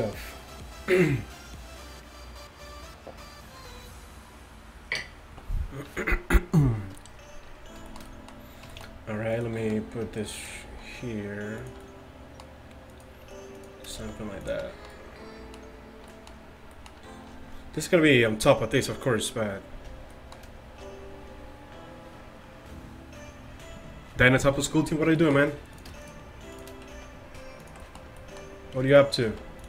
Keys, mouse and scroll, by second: 7.9 middle click, 9.4-11.1 drag, 10.7 s, 11.9 click, 14.0 s, 25.8-28.0 right drag, 27.0 alt+s, 29.3 alt+s.